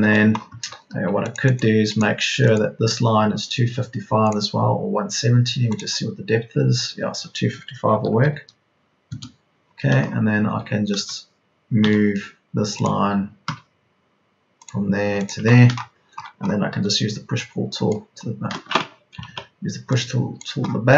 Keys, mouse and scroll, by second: 0.8 Escape, 5.2 Escape, 7.8 KP_2, 8.1 KP_5, 11.2-11.8 typing, 13.4 Escape, 16.7 p, 19.2 ctrl+z.